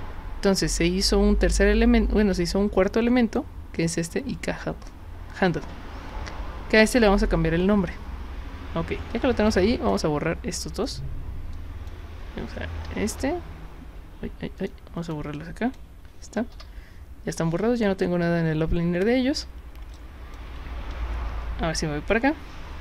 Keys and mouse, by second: 9.5 click, 10.8 click, 11.6-11.9 drag, 14.6 click, 15.0 click, 15.4-15.7 drag, 20.0-20.4 alt+drag.